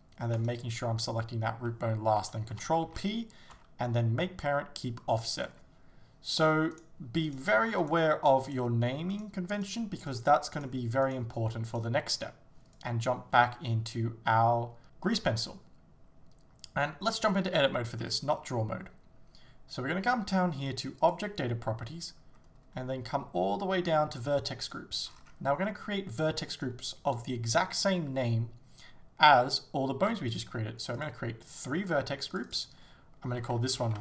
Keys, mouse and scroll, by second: 0.4 shift+right click, 5.5 ctrl+p, 5.5 Return, 5.5-6.8 drag, 6.8 right click, 7.3 right click, 7.9 right click, 8.5 right click, 9.2 right click, 9.6 right click, 10.1 right click, 10.6 right click, 11.1 right click, 11.7 right click, 12.2 right click, 17.6 Tab, 30.5-32.4 drag, 33.7-34.0 drag.